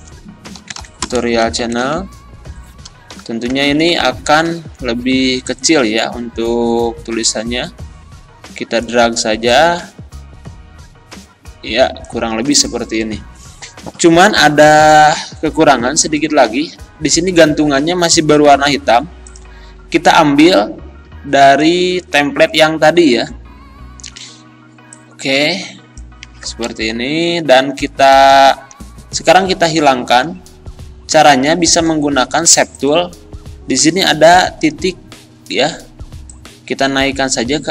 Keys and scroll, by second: 0.0-1.8 typing, 3.5 e, 26.9 Up, 28.1 Down.